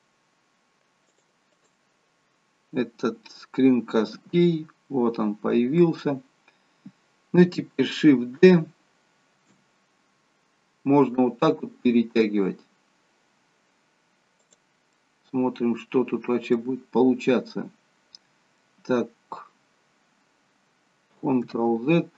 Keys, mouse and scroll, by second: 4.3 n, 9.7 shift+d, 15.1 middle click, 17.3 middle click, 21.6 ctrl+z.